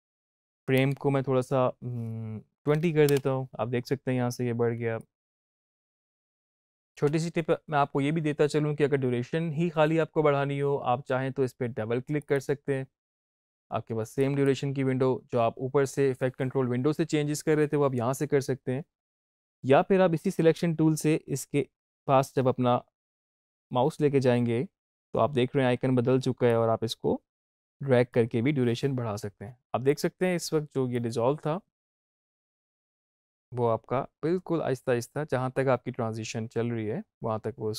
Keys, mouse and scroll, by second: 4.9 click, 5.4 space, 7.0 space, 12.1 click, 18.8 click, 26.4-32.4 drag, 32.4 space.